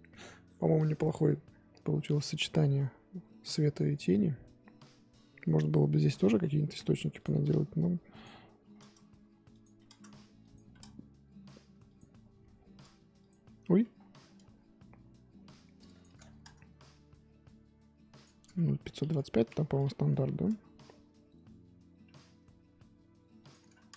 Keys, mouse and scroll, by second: 3.9 scroll down 1, 4.7-5.1 scroll up 2, 7.1 click, 8.1-19.0 drag, 19.0 KP_2, 23.3-23.9 drag.